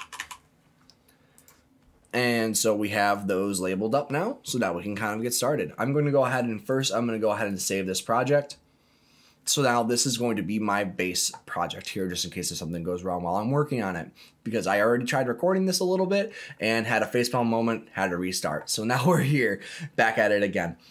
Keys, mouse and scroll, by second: 0.1 s, 3.0 click, 5.2 click, 6.6 click, 20.4-20.9 scroll up 4.